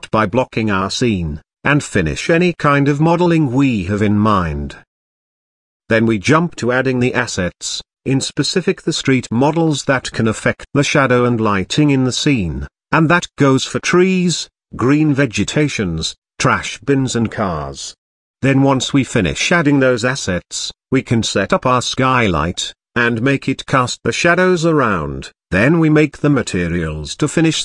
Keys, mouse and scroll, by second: 0.0 shift+middle click, 0.4 g, 0.8 middle click, 1.1 click, 1.4 click, 1.8 Tab, 2.0 middle click, 2.4-7.1 typing, 2.6 click, 3.1 Tab, 3.8 middle click, 4.0 middle click, 5.6 middle click, 6.4 click, 6.5 shift+middle click, 7.7 shift+click, 7.9 right click, 8.4-23.2 typing, 8.5 KP_Subtract, 8.7 middle click, 9.9 ctrl+click, 10.9 Tab, 11.0 shift+middle click, 11.5 click, 11.6 shift+middle click, 11.7 Tab, 11.8 Tab, 12.1 middle click, 12.2 click, 12.7 click, 12.9 Tab, 13.1 middle click, 13.7 click, 14.5 click, 14.6 shift+click, 15.3 shift+middle click, 15.7 middle click, 15.8 middle click, 16.1 middle click, 16.9 click, 18.3 click, 18.6 shift+click, 18.8 click, 19.3 middle click, 19.6 middle click, 20.2 click, 20.3 shift+middle click, 21.0 middle click, 21.2 click, 21.3 middle click, 21.8 shift+click, 21.9 middle click, 22.3 click, 22.5 shift+click, 23.5-24.6 drag, 27.3 click.